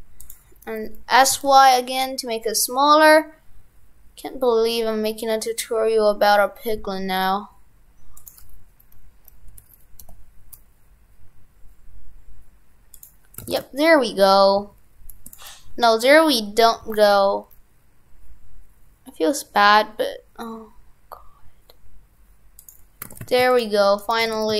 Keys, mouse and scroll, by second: 13.4 shift+f, 23.0 shift+f, 24.0 right click, 24.3 shift+f.